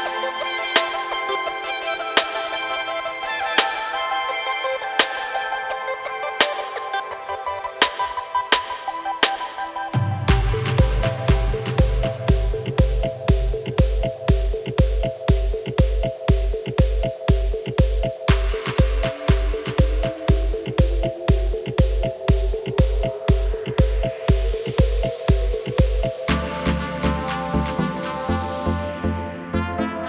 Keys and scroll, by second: 2.6 r, 3.6 KP_9, 4.8 Return, 27.3 KP_9, 27.6 KP_0, 28.8 Return.